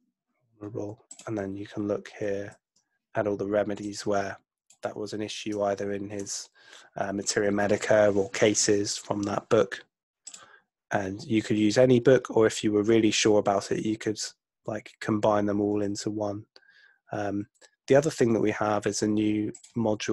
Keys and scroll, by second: 2.4 super+F2.